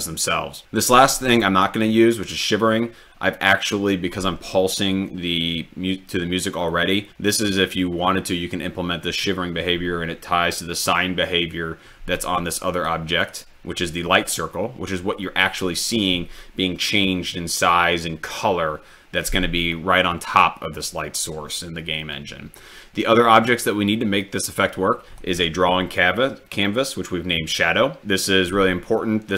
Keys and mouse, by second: 12.8 click, 14.5-16.2 drag, 19.7 click, 22.6 drag, 23.5 click, 24.2-25.3 drag.